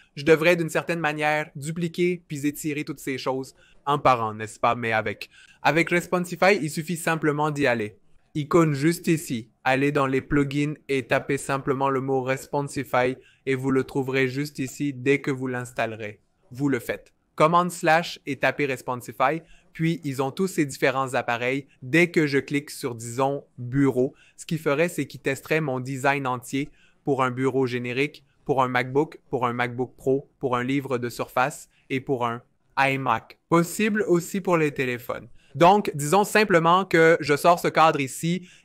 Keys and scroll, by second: 2.8 v, 3.9 super+z, 4.8 BackSpace, 9.4-12.6 typing, 17.9 super+/, 18.0-19.6 typing, 33.1 BackSpace, 38.0 super+/.